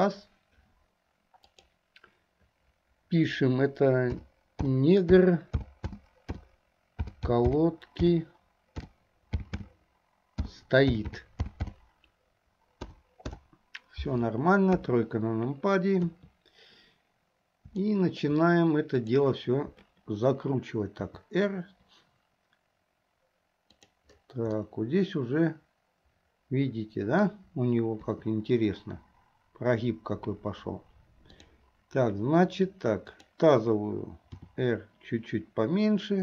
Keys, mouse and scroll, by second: 0.0 click, 15.3 KP_3, 16.3 KP_3, 17.9 shift+middle click, 19.1 click, 21.1 r, 24.7-28.1 middle drag, 28.1 KP_3, 31.3 click, 33.1 click, 34.5 r.